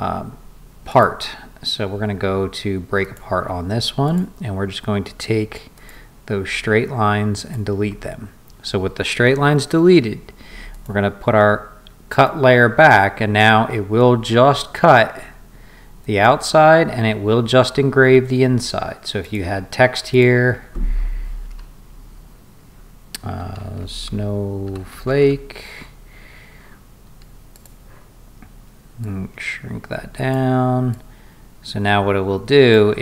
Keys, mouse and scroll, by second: 0.9 click, 3.0 click, 4.0 click, 5.7 click, 7.4 click, 10.7 click, 19.2 click, 20.1 click, 23.2-25.8 typing, 27.5 click, 29.0-30.3 drag, 30.9-32.7 drag.